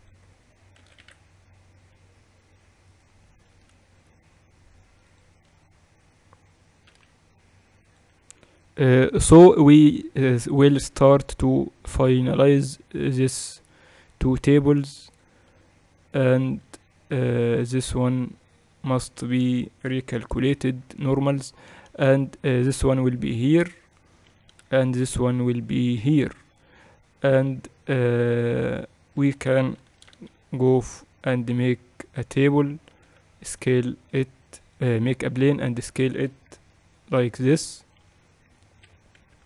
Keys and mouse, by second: 1.4 shift+d, 4.6-5.7 middle drag, 5.7-11.8 drag, 7.5-10.0 middle drag, 7.5 m, 11.8 middle click, 11.9 click, 12.0-13.7 typing, 15.8-20.9 drag, 17.9 a, 19.6 Tab, 19.9 a, 20.1 a, 20.9 ctrl+n, 21.3 Tab, 22.3 a, 22.6 a, 23.4-25.7 drag, 26.1-30.4 drag, 30.4 shift+c, 31.0 shift+a, 33.7 s, 37.1 KP_1.